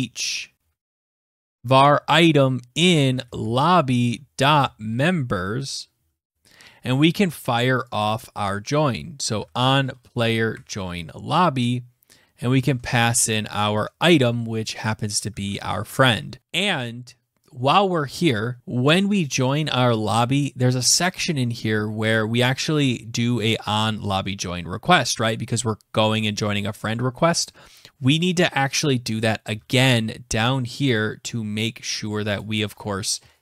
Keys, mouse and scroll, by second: 0.1 Left, 0.3 Down, 0.5 Tab, 1.0 Tab, 1.3 Tab, 2.2-4.8 typing, 5.4 Down, 5.6 Return, 7.5 click, 8.5-13.5 typing, 10.0 Tab, 14.8 ctrl+s, 17.6 click, 17.9-18.2 scroll down 4, 19.0 click, 19.0 scroll, 19.8-22.2 scroll, 22.9 click, 26.1-27.6 scroll, 28.9 ctrl+c, 30.3 click, 31.4 click, 31.8 click, 32.7 Return, 32.8 Return, 32.9 ctrl+v.